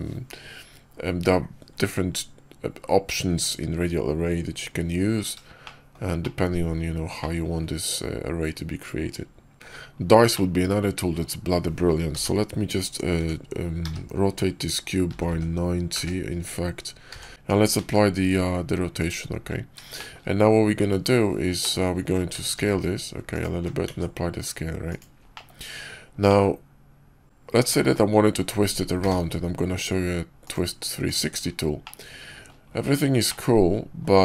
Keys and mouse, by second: 5.5-5.8 shift+middle drag, 6.1-6.6 middle drag, 7.1-7.5 middle drag, 10.2-11.1 middle drag, 12.0 r, 17.7 ctrl+a, 19.8 shift+click, 21.5 middle click, 22.2 s, 23.7 ctrl+a, 25.2 click, 26.2-27.4 drag, 28.9 q, 31.7 middle click, 31.9-32.4 drag, 33.2-33.6 drag, 33.6 middle click, 33.7 click.